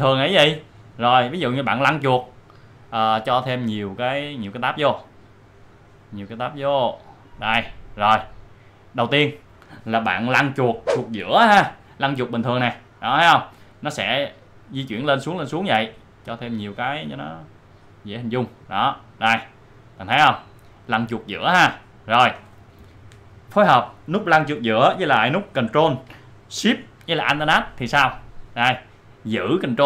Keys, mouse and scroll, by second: 2.1 scroll up 1, 3.4 scroll down 1, 4.5-6.1 drag, 6.6-9.8 drag, 11.7-12.0 scroll down 1, 12.0 scroll up 1, 14.0 scroll down 1, 14.9 scroll down 1, 16.0 scroll up 1, 17.1-18.8 drag, 18.8 scroll down 1, 20.5-20.8 scroll up 1, 20.8-21.2 scroll down 1, 21.2 scroll up 1, 22.6 scroll down 1, 28.7 click.